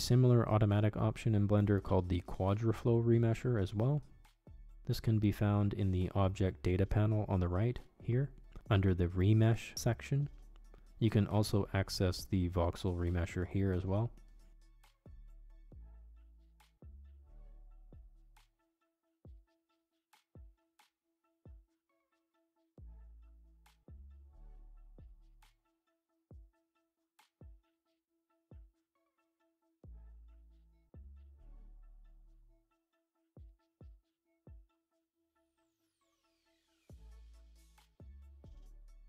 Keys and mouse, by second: 0.1-1.9 drag, 8.8-9.9 drag, 11.9 click, 16.5 click, 18.1 click, 18.5-20.6 middle drag, 21.1 Tab, 22.4-24.0 middle drag, 26.5 middle click, 27.8 Tab, 30.4 shift+d, 30.5-31.7 shift+drag, 31.0 BackSpace, 31.2 BackSpace, 31.8 click, 32.4 click, 33.0 ctrl+Tab, 33.3 click, 34.3 ctrl+Tab, 35.1 Tab, 35.5 click, 36.0-37.0 drag, 37.8 click, 38.2 click, 38.4 middle click, 38.9 click.